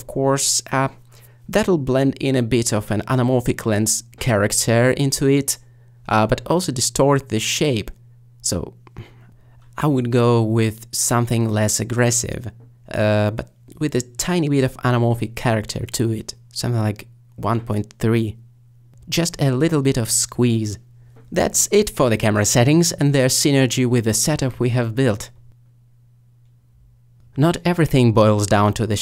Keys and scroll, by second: 0.0 2, 11.0 Return, 11.0 1, 12.2 3.